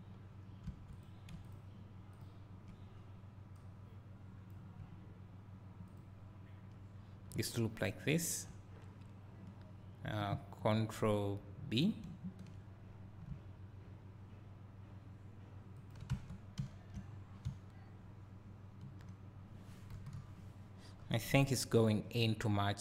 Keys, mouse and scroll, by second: 0.8 2, 1.0 click, 2.3 ctrl+click, 3.7 ctrl+click, 6.1 ctrl+click, 7.3 `, 12.1 ctrl+b, 15.9 shift+click, 16.2 Tab, 16.7 `, 17.0 scroll down 2, 19.9 KP_1, 21.0-22.3 scroll up 2, 22.3-22.8 scroll up 1.